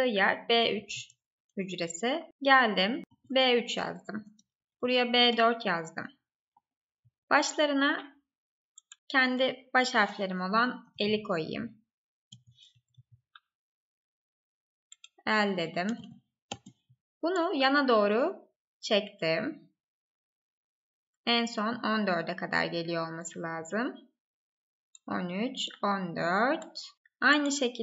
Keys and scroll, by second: 0.0-0.4 typing, 0.5 Right, 1.1 Down, 1.4 Right, 4.5 Up, 4.7 Right, 7.2 Up, 8.3 Left, 12.6 Up, 12.9 Right, 16.8 Up.